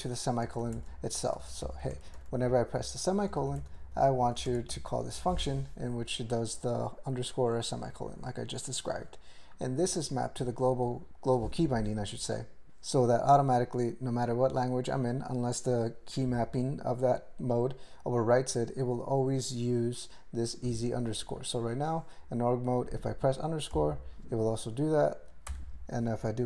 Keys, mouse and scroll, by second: 0.5 ctrl+g, 0.7 alt+m, 1.3 ctrl+space, 1.6 ctrl+alt+f, 2.0 ctrl+g, 2.1 alt+b, 2.3 alt+b, 2.5 alt+b, 2.7 alt+b, 3.4 ctrl+n, 3.7 alt+b, 3.8 alt+b, 4.2 alt+b, 4.5 ctrl+space, 4.7 ctrl+alt+f, 5.2 ctrl+g, 7.1 click, 7.5 click, 9.5 click, 21.4 click, 23.8 ;, 25.5 BackSpace.